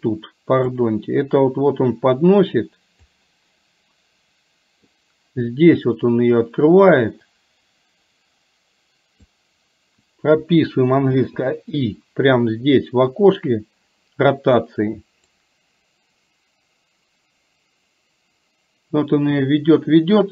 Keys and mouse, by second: 0.9-3.2 drag, 4.0-5.0 middle drag, 7.0-9.4 drag, 11.2 i, 15.5-20.3 drag.